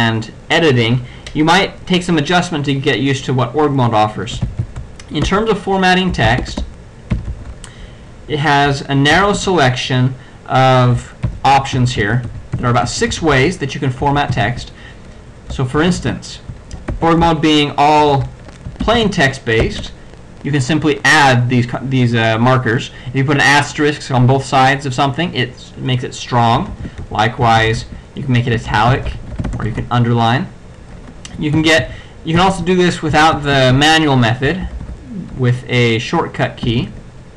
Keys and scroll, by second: 4.4 n, 5.3 Tab, 6.5 Tab, 6.5 n, 7.2 n, 9.2 ctrl+x, 9.4 ctrl+q, 11.3 n, 11.8 alt+f, 12.6 alt+b, 12.9 alt+f, 15.8 space, 17.0 ctrl+alt+g, 18.1 shift+8, 19.0 alt+f, 26.7 ctrl+f, 27.0 ctrl+/, 27.6 ctrl+alt+f, 27.8 alt+/, 28.7 alt+f, 28.9 alt+b, 29.2 alt+shift+-, 29.5 alt+shift+f, 29.7 alt+shift+-, 31.6 alt+f, 32.4 alt+b, 33.3 space, 33.8 alt+f, 34.7 ctrl+c, 34.7 ctrl+x, 36.7 ctrl+f.